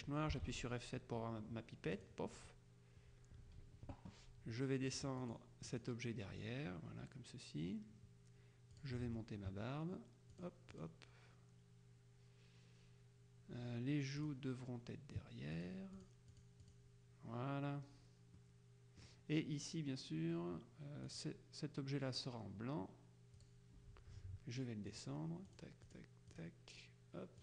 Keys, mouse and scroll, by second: 0.5 F7, 2.0 click, 3.5 F1, 5.4 click, 8.9 click, 10.4 click, 14.3 click, 15.6 click, 18.5-19.6 drag, 21.2 click, 23.5 click, 25.0 click, 26.0 click.